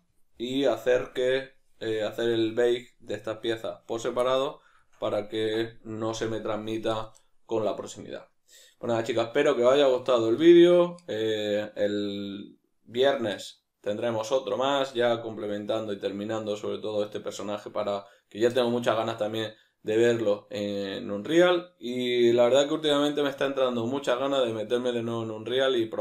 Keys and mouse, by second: 0.9-1.8 right drag, 2.6 right click, 3.1 right click, 4.3-26.0 ctrl+middle drag.